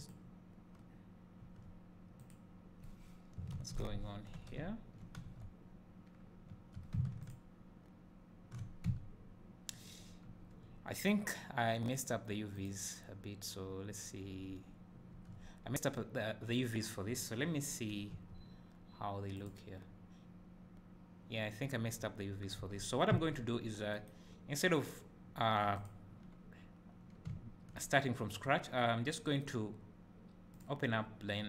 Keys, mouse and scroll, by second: 1.6 Tab, 2.3 click, 4.6 `, 5.4 Tab, 7.5 ctrl+shift+click, 8.8 `, 10.5 Tab, 14.3-19.5 drag, 18.2 a, 22.6 Tab, 23.1 `, 26.0 click, 27.5 `.